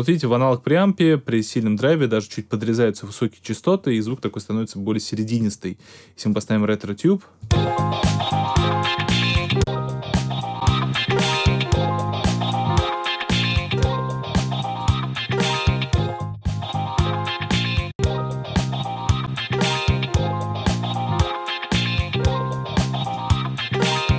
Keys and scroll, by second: 7.4 space.